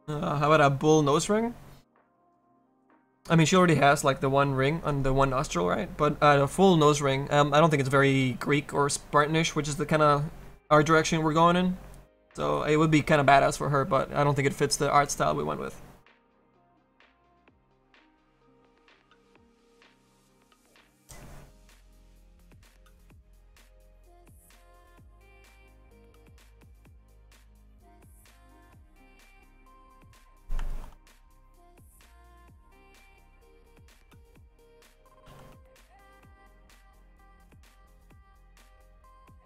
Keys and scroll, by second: 34.9 s, 35.3 s.